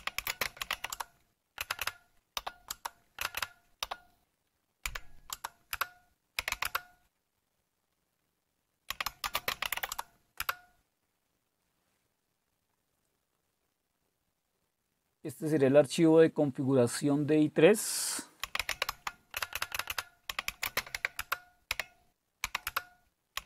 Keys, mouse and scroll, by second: 0.0-6.9 typing, 8.7-10.2 typing, 10.4 Return, 13.2-18.4 scroll up 1, 18.2-23.4 typing, 22.7 Return.